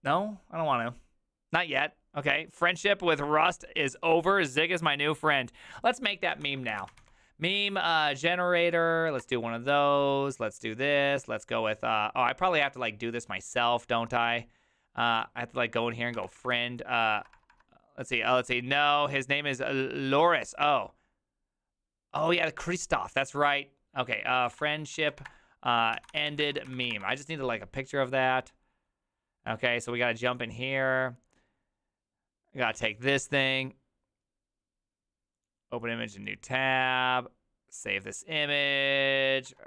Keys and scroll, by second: 6.5 ctrl+t, 6.5-7.6 typing, 8.0 Down, 8.7-9.2 Down, 9.2 Return, 9.2 typing, 15.9-17.6 typing, 24.2-27.5 typing, 39.3-39.6 typing.